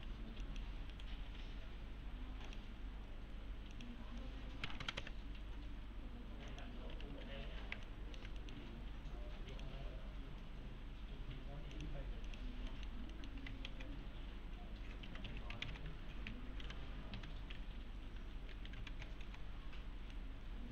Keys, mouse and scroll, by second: 0.0 1, 0.4 click, 0.9 right click, 2.5 click, 4.6 Left, 6.5 click, 6.9 1, 7.2 scroll down 1, 7.4 F3, 7.9 alt+middle click, 9.5 click, 11.7 click, 12.7 middle click, 13.7 alt+x, 14.8-18.5 typing, 18.9 alt+x, 19.9 scroll down 1, 20.1-20.7 alt+middle click.